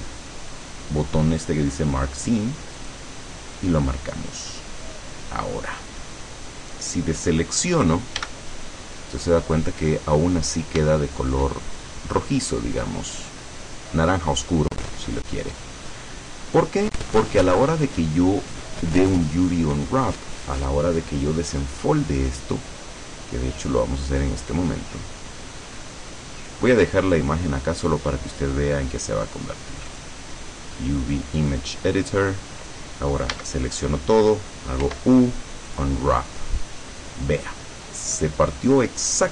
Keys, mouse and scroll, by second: 2.9 click, 4.0 scroll down 2, 4.4 click, 5.4-5.8 scroll up 1, 6.2 scroll up 1, 8.3 a, 9.3-9.9 scroll up 1, 10.4 scroll up 1, 11.0 shift+click, 11.8-12.5 shift+scroll up 3, 12.9-13.3 scroll down 2, 13.5-14.0 scroll down 2, 14.7 scroll down 2, 15.0-16.1 middle drag, 16.1 scroll down 2, 16.6-18.3 middle drag, 20.6-21.6 middle drag, 24.2-28.1 drag, 30.0 click, 31.5 click, 33.4 a, 34.9 u, 35.8 click.